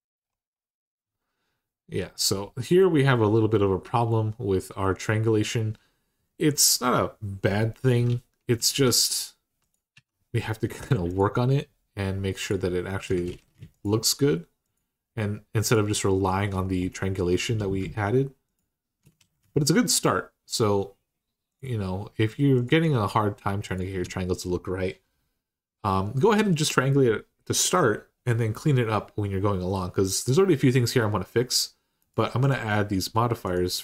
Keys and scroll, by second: 7.8 Tab, 8.4 typing, 9.7 Tab, 13.1 ctrl+z, 19.0 ctrl+z.